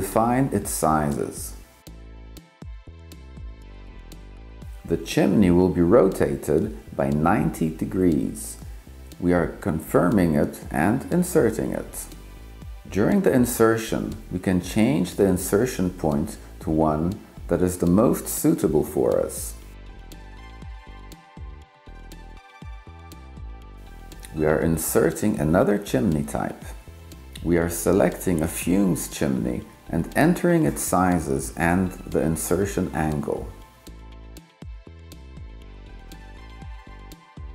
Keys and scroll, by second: 0.0-1.8 typing, 29.5-30.4 typing, 31.2 Tab, 32.8 3, 33.2 6.